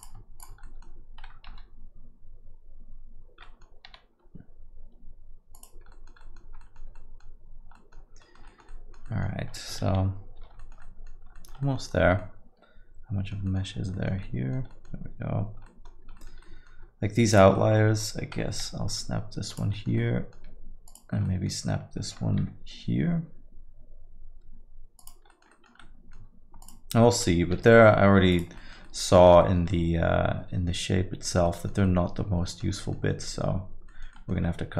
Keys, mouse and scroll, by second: 0.3 shift+click, 0.6 alt+middle click, 1.5 f, 3.4 middle click, 3.8 g, 5.9 alt+middle click, 6.2 middle click, 6.6 alt+middle click, 7.7 middle click, 7.9 alt+middle click, 8.2 alt+middle click, 8.4 middle click, 8.7 alt+middle click, 9.0 middle click, 9.3 scroll down 2, 9.5 middle click, 9.8 shift+z, 10.4 shift+z, 10.6 alt+middle click, 10.8 middle click, 11.1 scroll down 2, 11.3 alt+middle click, 11.6 middle click, 11.9 scroll up 1, 12.2 alt+middle click, 13.7 scroll up 1, 13.9 middle click, 14.2 alt+middle click, 14.7 middle click, 15.6 alt+middle click, 16.1 middle click, 16.3 alt+scroll up 1, 16.4 alt+middle click, 17.3 click, 17.5 alt+middle click, 18.6 g, 19.7 middle click, 20.0 alt+middle click, 20.8 click, 21.2 alt+middle click, 22.4 g, 25.3 alt+middle click, 25.5 middle click, 25.8 alt+middle click, 26.6 click, 27.5 g, 28.6 alt+middle click, 28.8 middle click, 29.4 middle click, 29.7 alt+middle click, 31.8 alt+middle click, 32.9-33.4 scroll down 3, 33.4 alt+middle click, 33.8 alt+middle click, 34.1 middle click, 34.5 shift+z.